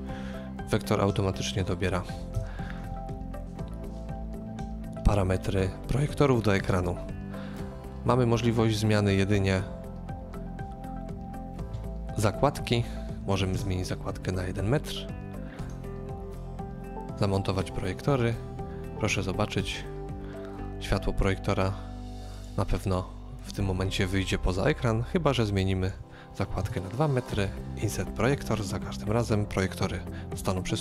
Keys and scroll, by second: 2.4 KP_0, 13.4 typing, 26.5 typing.